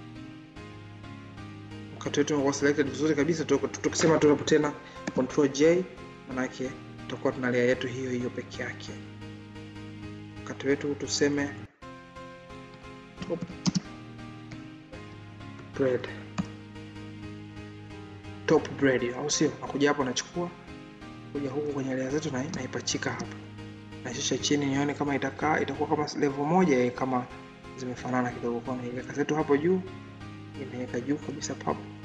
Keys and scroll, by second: 1.8 ctrl+z, 4.9 ctrl+j.